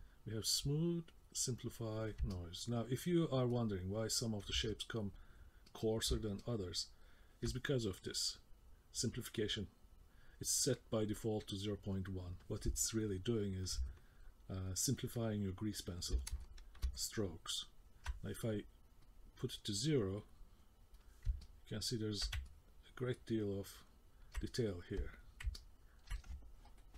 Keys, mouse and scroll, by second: 1.1 click, 2.3 middle click, 3.5 middle click, 4.7 ctrl+middle click, 5.7 middle click, 6.4 middle click, 12.9 middle click, 13.9 ctrl+middle click, 14.7 middle click, 16.4 shift+middle click, 17.0 middle click, 19.0 click, 20.6 click.